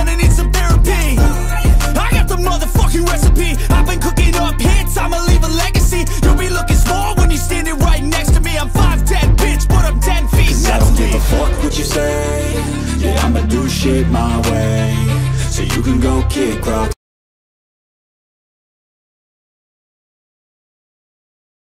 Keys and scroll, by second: 9.5 ctrl+alt+shift+e.